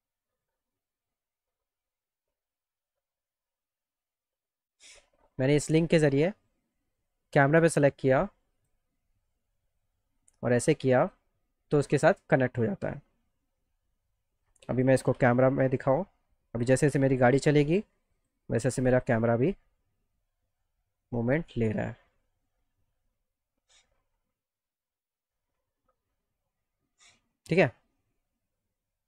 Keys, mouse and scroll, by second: 2.6-5.6 drag, 8.6 click, 9.6-11.1 drag, 13.0-14.8 drag, 15.2 c, 18.1 click, 19.0 click.